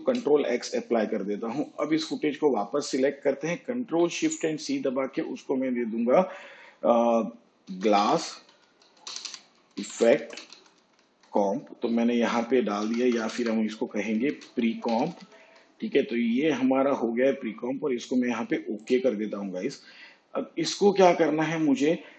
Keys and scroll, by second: 3.9 ctrl+shift+c, 7.7-11.1 typing, 12.8 BackSpace, 14.1-15.4 typing.